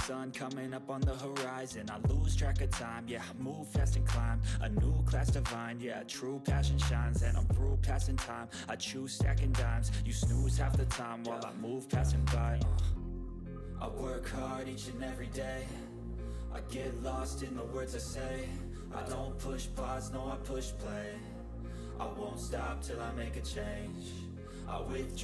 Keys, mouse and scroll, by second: 0.3 click, 3.8 typing, 4.7 ctrl+space, 5.7 click, 7.3-8.7 typing, 9.2 click, 11.3-12.7 drag, 14.0 space, 14.3 w, 15.6 typing, 17.2-18.5 typing, 19.8 typing, 23.2 click, 23.7-24.6 typing.